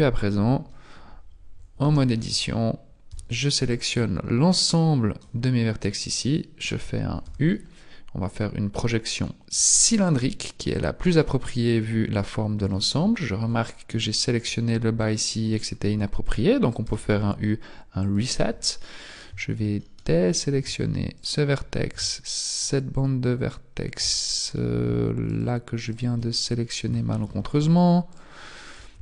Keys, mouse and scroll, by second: 1.8 z, 3.1 b, 5.2 b, 7.2 u, 9.9 u, 12.7 shift+middle click, 13.1-15.0 scroll up 8, 15.0-16.6 scroll down 1, 16.6 scroll down 3, 16.8 u, 18.1 u, 18.6-20.0 scroll up 4, 20.0 middle click, 21.1 shift+right click, 22.6 alt+shift+right click, 24.1-25.2 scroll down 4, 25.2 alt+shift+right click, 25.2 scroll down 1, 25.8 alt+shift+right click, 26.3 scroll up 5, 27.0 shift+middle click, 28.1 shift+right click.